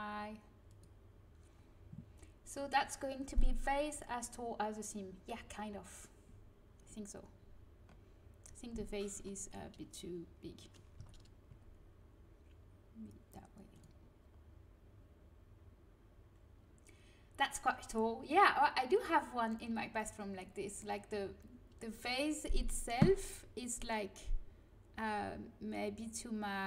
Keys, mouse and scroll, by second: 0.6-4.2 drag, 10.9 a, 11.4 s.